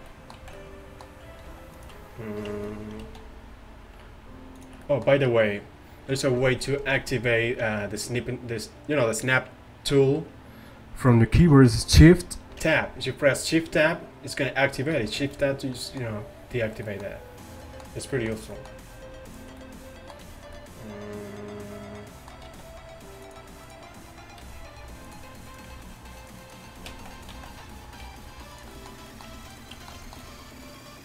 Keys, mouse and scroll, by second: 0.4 z, 1.5 alt+s, 2.6 shift+Tab, 3.1 alt+s, 12.7 shift+Tab, 15.2 shift+Tab, 19.3-20.7 right drag, 20.7 click, 22.5 alt+s, 23.7-26.1 right drag, 24.5 g, 25.8 g, 26.9 z, 27.4 z, 28.1 g, 28.8 middle click, 29.6-31.0 drag.